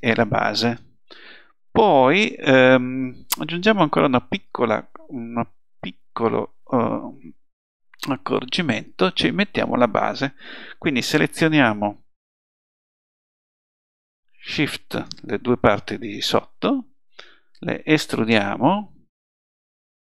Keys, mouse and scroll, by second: 2.8-4.6 middle drag, 5.9 middle click, 19.6 e.